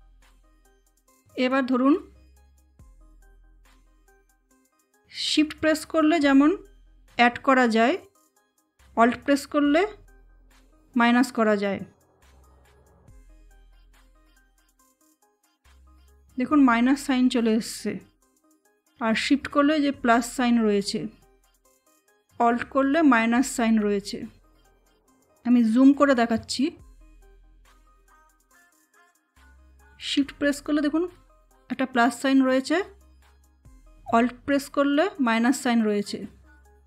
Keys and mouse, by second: 14.4-24.5 alt+drag.